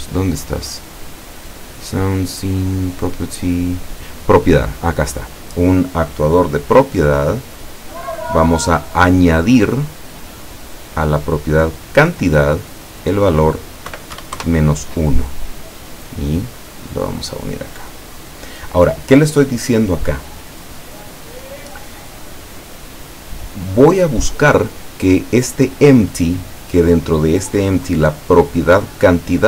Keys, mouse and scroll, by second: 4.9 click, 7.4 click, 9.7 click, 10.7 click, 11.9 click, 12.9 click, 13.9 KP_Subtract, 14.2 KP_1, 14.4 KP_Enter, 16.5-18.2 drag, 20.2-23.3 middle drag.